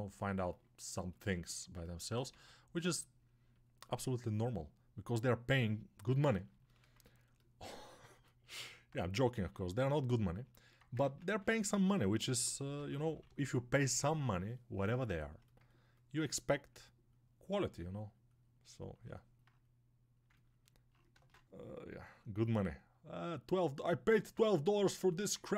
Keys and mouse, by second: 2.2 shift+d, 5.2-10.3 drag, 9.3 s, 10.3-13.9 alt+middle drag, 10.9 ctrl+Tab, 12.1 g, 12.6 ], 13.9-25.5 drag, 21.0 ctrl+space.